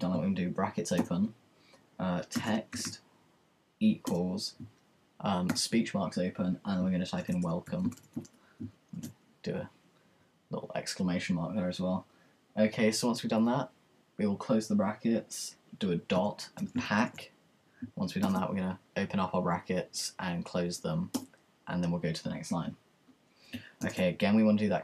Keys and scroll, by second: 0.1-4.3 typing, 5.4-8.9 typing, 10.0-10.8 typing, 16.1-18.7 typing, 20.2 typing, 23.6-24.3 typing.